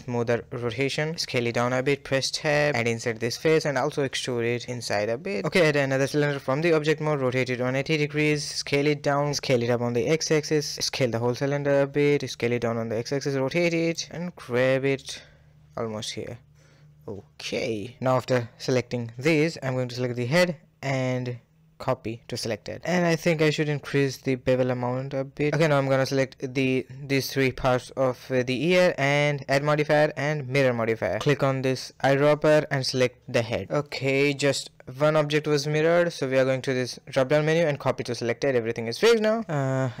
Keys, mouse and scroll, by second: 0.2 KP_3, 0.5 scroll up 1, 0.5 shift+middle click, 1.0 Tab, 1.3 click, 2.5 middle click, 3.0 e, 3.7 scroll down 2, 4.0 Tab, 4.1-4.6 middle drag, 4.6 KP_1, 4.8 scroll up 1, 4.9 a, 6.9 r, 7.4 g, 8.7 s, 9.1 s, 9.8 s, 11.3 s, 12.1 g, 12.4 r, 13.2 g, 14.9-15.2 scroll down 2, 15.2 a, 15.6 a, 15.7-18.4 middle drag, 18.4 click, 18.8-19.4 middle drag, 19.4 shift+click, 19.8 shift+click, 20.9-23.0 drag, 23.2 click, 24.2-26.0 shift+drag, 26.0-26.7 scroll down 5, 26.7-27.4 middle drag, 27.4 shift+click, 27.7-28.5 middle drag, 28.5 shift+click, 29.6-30.6 drag, 32.0 click, 32.7 scroll down 2, 33.0-36.0 middle drag, 36.5-37.8 drag, 37.8-39.9 middle drag, 39.9 KP_1.